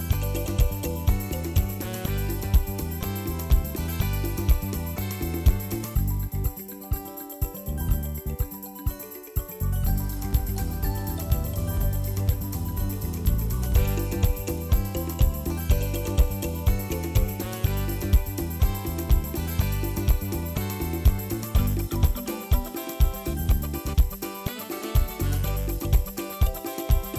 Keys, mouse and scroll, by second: 0.0-0.5 scroll down 6, 0.5 shift+middle click, 0.5 scroll up 1, 0.8 shift+middle click, 1.1 click, 1.6 Tab, 1.8 alt+z, 2.0 click, 2.5 s, 3.2 s, 4.0 Tab, 4.1 alt+z, 4.4 ctrl+s, 4.5 scroll down 2, 4.6 shift+middle click, 4.8 ctrl+s, 5.0 middle click, 5.6 KP_1, 6.0 ctrl+s, 6.0 scroll down 1, 6.3 scroll up 2, 6.5 Tab, 6.8 alt+z, 6.8 click, 7.1 s, 7.5 Tab, 7.8 ctrl+s, 7.9 alt+z, 8.2-8.6 middle drag, 8.6 click, 8.9 shift+click, 9.4 ctrl+p, 9.8 click, 10.0 g, 10.6 KP_1, 10.8-11.3 scroll down 1, 11.5-12.3 drag, 12.3 ctrl+p, 12.8 ctrl+s, 13.9-14.3 middle drag, 14.3 scroll up 1, 14.4-15.2 middle drag, 15.2 scroll up 1, 15.3 middle click, 16.0 KP_1, 16.3 ctrl+s, 16.5-16.8 shift+middle drag, 16.8 scroll down 2, 16.9 shift+middle click, 17.2 ctrl+s, 18.9 middle click, 19.5 KP_1, 20.1 ctrl+s, 20.2-20.5 scroll up 2, 20.5 click, 21.1 r, 24.0 f, 24.8 z, 25.2 g, 27.1 shift+middle click.